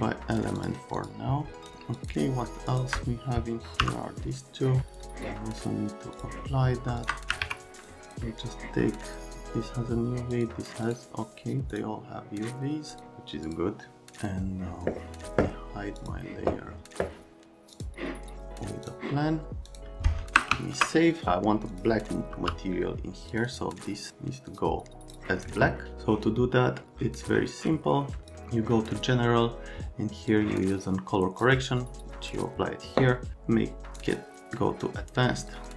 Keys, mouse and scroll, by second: 0.6 middle click, 1.0 middle click, 3.8 m, 5.0 click, 6.2 click, 7.4 alt+q, 7.8 click, 8.1 click, 9.1 click, 10.3 click, 10.9 right click, 11.7 click, 17.8 click, 18.9 click, 19.7 click, 20.5 ctrl+s, 22.4 n, 23.3 click, 23.4 click, 24.1 click, 24.5 click, 28.2 click, 30.3-31.4 drag, 33.3 click, 35.4 click, 35.6 click.